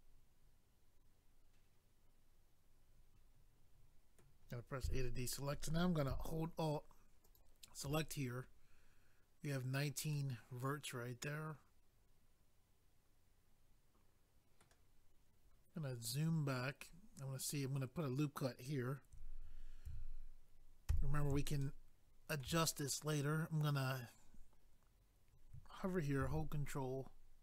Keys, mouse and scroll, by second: 4.8 a, 7.2 alt+click, 7.3 alt+click, 10.1 middle click, 15.8 scroll down 1, 21.6 shift+middle click, 26.2 ctrl+r.